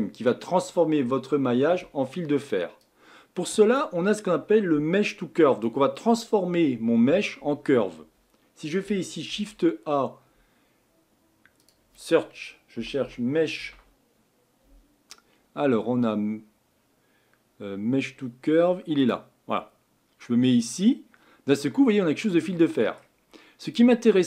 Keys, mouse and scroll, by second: 0.0-19.1 middle drag, 21.6-24.2 middle drag.